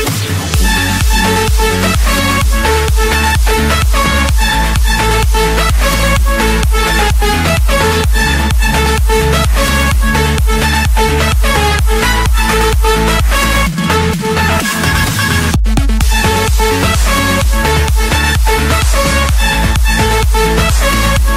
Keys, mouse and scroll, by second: 0.0 Escape, 1.5-2.6 drag, 3.5-4.7 middle drag, 5.7 e, 7.3-7.7 typing, 8.6 Return, 11.7 typing, 13.2 Return, 15.8-16.3 typing, 17.4 Return, 19.1 click, 19.7 Return, 20.5 click, 20.8 Return.